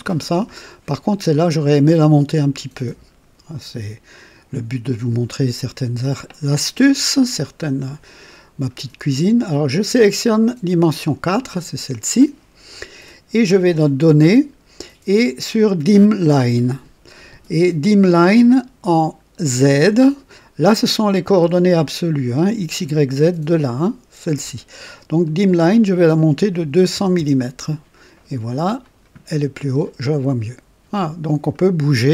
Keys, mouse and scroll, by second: 4.0 click, 7.4-7.9 scroll down 3, 8.6 scroll up 2, 10.8 click, 14.0 click, 25.1 click, 26.5 KP_2, 26.8 KP_0, 27.1 KP_0, 28.7 click, 29.5-31.5 drag, 30.2 typing.